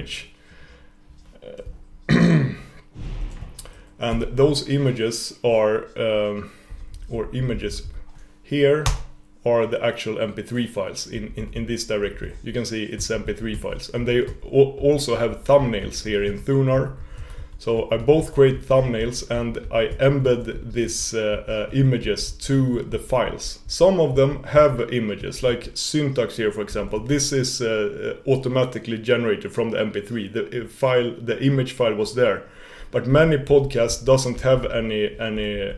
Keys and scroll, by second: 4.2 alt+e, 12.4 typing.